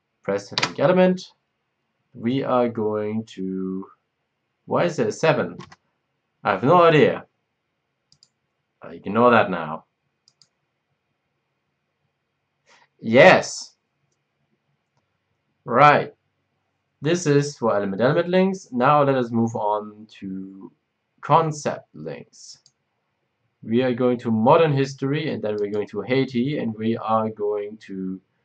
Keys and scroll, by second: 0.5 Return.